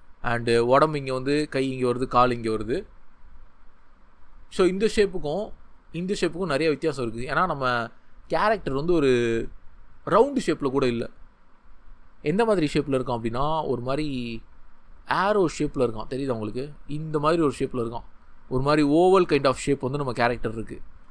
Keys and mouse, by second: 1.5-5.8 drag, 14.5-16.1 drag, 16.2 ctrl+z.